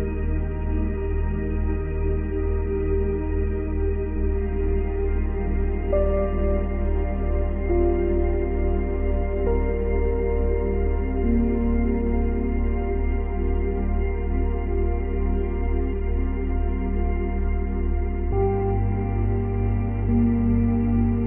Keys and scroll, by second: 1.4 space, 7.8 space.